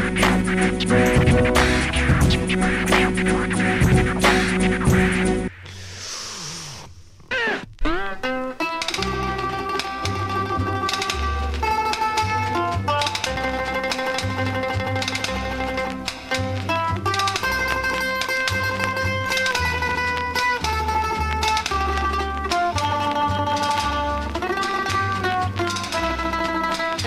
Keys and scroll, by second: 0.4 space, 1.7-6.9 typing, 8.2 space, 10.5 m, 13.2-14.1 typing, 13.7 Right, 15.5-16.4 typing, 17.6 m.